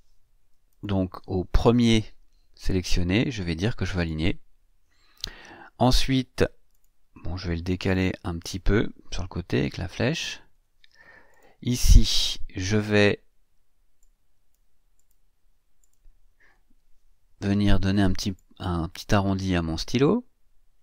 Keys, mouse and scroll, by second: 0.7 shift+click, 4.0 click, 6.7 click, 7.9 click, 8.4 click, 9.7 Left, 11.3 click, 14.0 click, 14.9 click, 15.8 click, 18.3-20.8 drag.